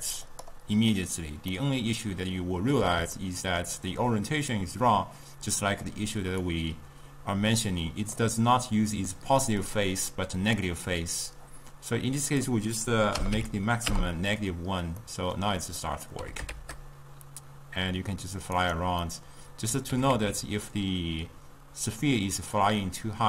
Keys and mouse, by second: 1.6-5.6 middle drag, 5.6 click, 6.5-9.6 drag, 9.7 drag, 12.3-15.1 drag, 15.1-16.4 middle drag, 16.4 g, 19.1-20.1 middle drag, 20.1 g.